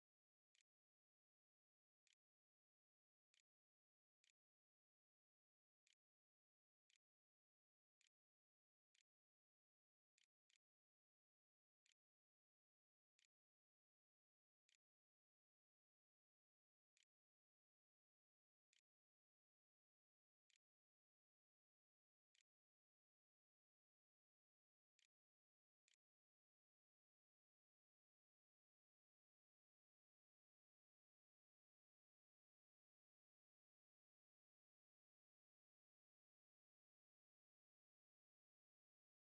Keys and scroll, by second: 0.0-14.2 typing, 16.8 Tab, 17.2-24.5 typing, 25.2 ctrl+z, 25.3 ctrl+s, 26.1 a.